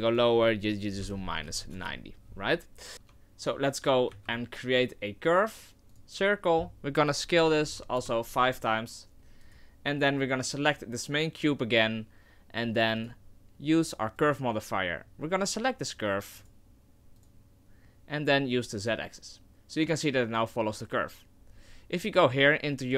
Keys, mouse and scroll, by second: 2.9 right click, 3.0 Tab, 4.1 shift+a, 7.3 s, 9.1 ctrl+z, 9.4 right click, 13.0 click, 15.9 click, 16.4 click, 18.8 click.